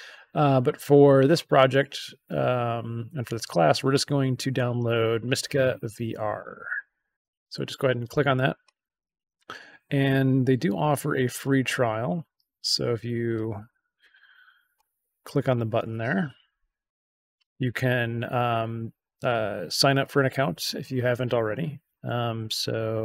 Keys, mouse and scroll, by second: 6.3 click, 10.2-10.6 scroll down 1, 11.3 click.